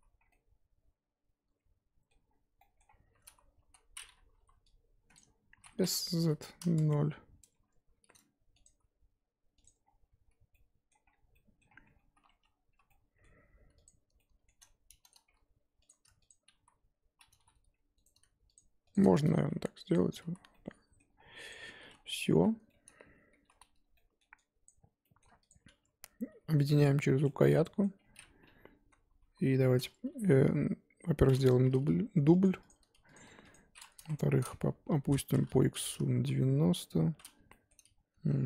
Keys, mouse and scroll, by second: 0.0 z, 0.2 scroll down 3, 0.3-2.3 middle drag, 2.3 scroll down 1, 2.5-3.0 scroll up 3, 2.6 middle click, 3.0 3, 3.7 z, 4.0-4.3 scroll up 3, 4.3 KP_1, 5.1 click, 5.5 s, 7.9 r, 8.6 g, 9.8 scroll down 4, 10.0 Tab, 10.3 z, 10.5 middle click, 11.1 scroll down 4, 11.3 middle click, 11.7-12.2 scroll up 6, 11.8 Tab, 12.2 2, 12.9 middle click, 13.8 click, 14.2-15.9 middle drag, 15.9 click, 16.3 shift+click, 16.6 z, 17.3 g, 18.5 shift+click, 18.9 shift+click, 19.3 g, 20.0 Tab, 20.3 z, 20.5 scroll down 1, 20.5 middle click, 21.2-22.3 scroll down 13, 21.5 click, 22.3 h, 22.7-24.6 middle drag, 24.6 click, 24.7 scroll up 2, 25.1 middle click, 25.5 shift+click, 26.3 ctrl+j, 26.5 middle click, 26.8-27.2 scroll up 4, 27.2 shift+middle click, 28.0-29.1 scroll down 4, 29.2 KP_7, 31.7 shift+d, 32.7 click, 34.0 KP_1, 34.9 r, 36.6 KP_7, 37.1 scroll down 1, 37.5-38.4 shift+middle drag.